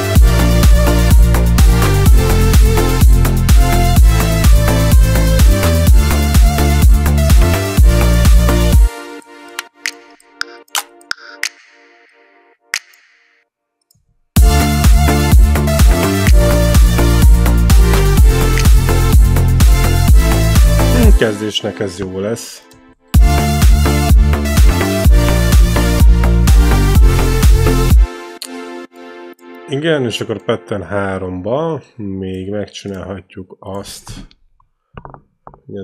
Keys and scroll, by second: 8.6 space, 14.1 space, 20.8 space, 23.0 space, 27.8 space.